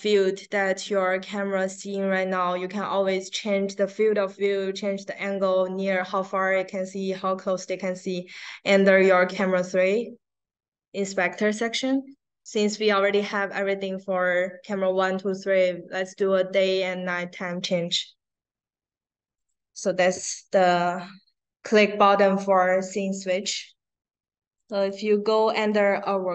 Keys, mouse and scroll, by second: 0.2 click, 1.5 click, 19.3 click, 24.5 click, 25.6-26.3 drag.